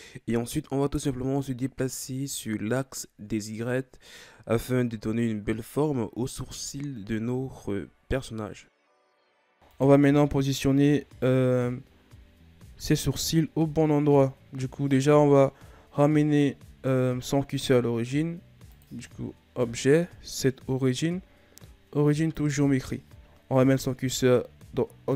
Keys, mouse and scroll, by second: 4.1 KP_1, 4.8 Tab, 5.3-5.6 scroll down 5, 5.6 a, 6.0-6.8 scroll down 2, 6.8-8.3 scroll up 5, 8.3 KP_3, 9.6 right click, 10.0 Tab, 10.7 Tab, 18.6-21.7 drag.